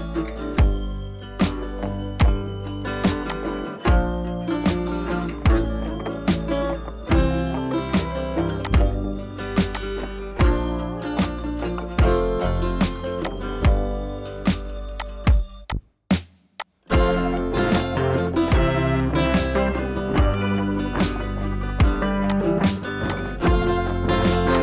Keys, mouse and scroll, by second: 1.8 scroll down 1, 2.0 space, 2.2 click, 2.5 space, 2.8 scroll up 1, 3.2 click, 4.4 ctrl+z, 5.6 click, 10.0-10.6 shift+click, 11.0 ctrl+t, 12.0-13.2 scroll down 2, 13.5-14.2 click, 15.8-16.3 drag, 18.0-18.6 shift+drag, 19.2 ctrl+t, 19.6 right click, 20.8 click, 22.6 scroll up 1, 23.4-24.2 shift+click.